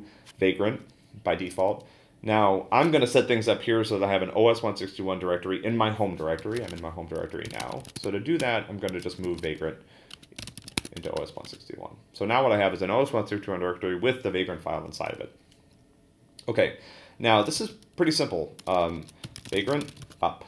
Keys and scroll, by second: 6.1-11.3 typing, 11.0 Return, 11.4 Return, 17.2-20.4 typing.